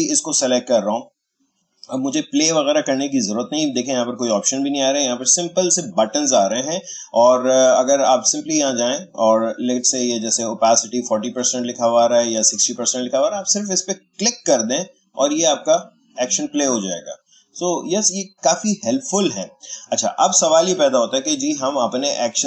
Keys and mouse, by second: 14.0 click, 22.3 click.